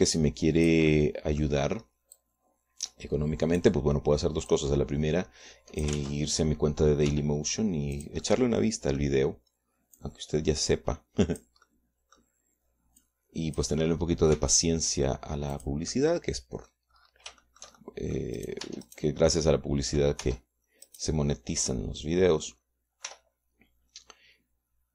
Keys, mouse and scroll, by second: 0.0 middle click, 1.0-2.4 drag, 3.7-5.3 drag, 6.0-7.6 drag, 7.5 ctrl+z, 8.6 g, 9.5-10.7 drag, 9.8 right click, 11.5-13.1 drag, 13.2 click, 13.2 right click, 13.9 middle click, 14.5 click, 15.9 r, 17.1 click, 17.4 middle click, 19.0 shift+middle click, 19.9 shift+middle click, 20.2 shift+Tab, 20.4 shift+middle click, 21.8 Tab, 22.4 middle click, 23.2 click, 24.1 middle click, 24.6 r.